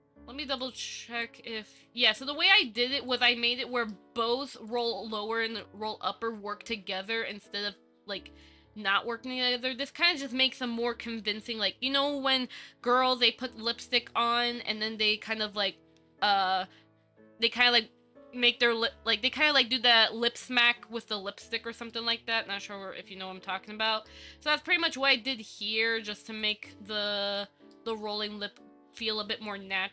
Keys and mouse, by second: 1.4 click, 2.3 middle click, 3.4 z, 3.6 middle click, 6.9-7.5 middle drag, 22.1-23.9 middle drag, 24.0 shift+middle drag, 24.7 middle click, 25.5 middle drag, 26.9-27.2 middle drag, 27.9 middle click, 29.3 click.